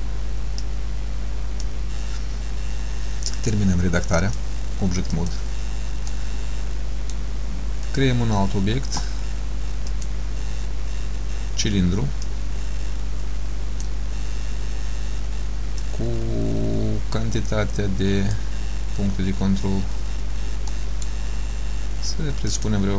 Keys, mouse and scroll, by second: 0.7 click, 4.3 click, 6.2 middle click, 10.0 click, 12.3 click, 15.9 click, 20.0-20.4 scroll down 3, 20.8 middle click, 22.6 click.